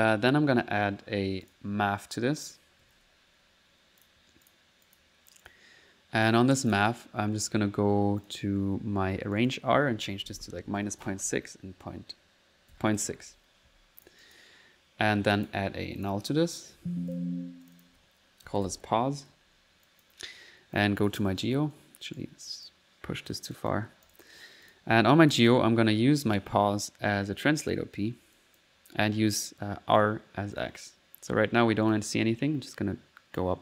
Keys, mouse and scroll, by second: 1.5 click, 2.4 right click, 2.6-3.3 typing, 4.0 click, 4.5-6.0 drag, 8.2 click, 9.4 click, 14.0 click, 14.6 middle click, 14.7 click, 15.4 click, 16.0 click, 16.4-17.3 typing, 21.1-25.2 alt+drag.